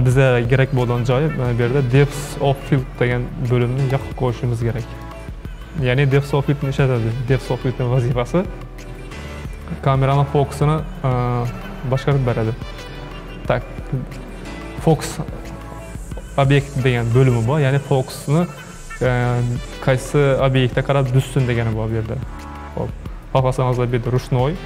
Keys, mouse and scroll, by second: 4.2 click, 5.0-8.1 drag, 11.0-13.6 scroll down 2, 24.2-24.6 drag.